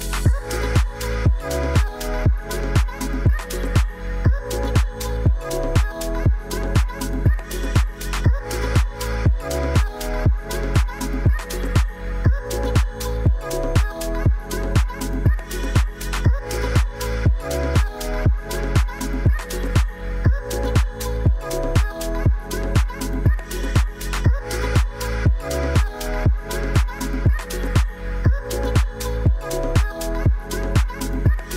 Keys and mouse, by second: 0.2 middle drag, 0.7 ctrl+s, 1.3 click, 2.8 drag, 4.3 click, 4.7 click, 5.8 click, 7.6 shift+click, 8.4 ctrl+a, 9.6-10.9 right drag, 10.9 middle click, 11.6 ctrl+s, 12.2 middle drag, 13.0 click, 21.5-23.0 drag, 24.3-26.3 drag, 29.7-31.5 drag.